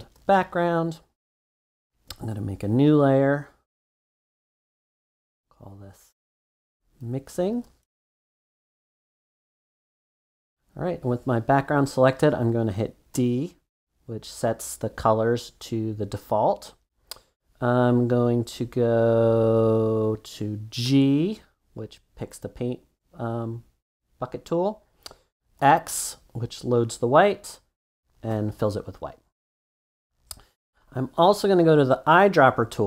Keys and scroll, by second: 0.0-0.5 typing, 6.2-8.0 typing, 13.1 d, 20.8 g, 25.6 x.